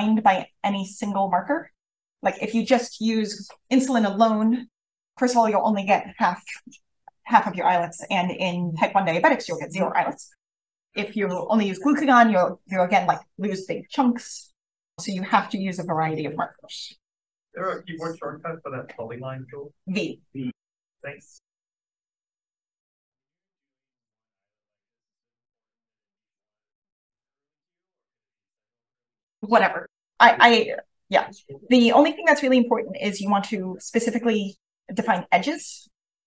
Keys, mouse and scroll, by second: 14.9 v, 15.3-28.7 drag, 15.7-18.9 scroll up 1, 18.9-20.9 scroll up 1, 20.9-27.5 scroll up 1, 30.5 v, 31.0-35.4 drag, 31.8-32.9 scroll up 1.